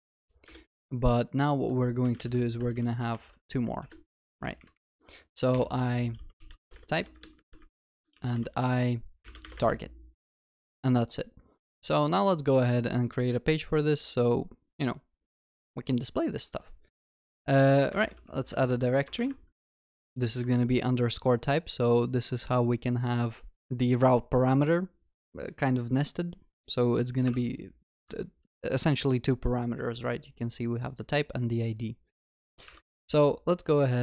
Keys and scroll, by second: 10.5 ctrl+s, 17.0 alt+Insert, 27.3 alt+Insert, 32.7 alt+Insert.